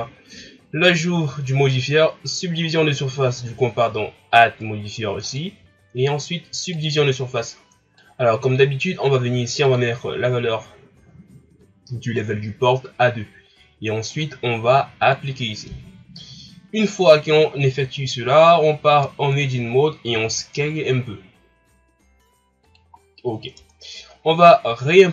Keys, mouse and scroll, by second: 6.8-8.3 drag, 9.7-12.7 drag, 14.1-16.2 drag, 16.2 scroll up 2, 18.9 Tab, 20.1 s, 23.0-23.6 scroll down 3, 23.6 Tab.